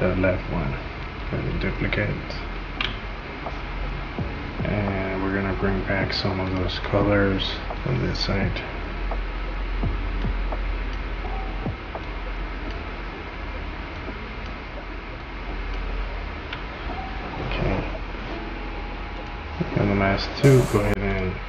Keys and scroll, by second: 2.7 ctrl+d.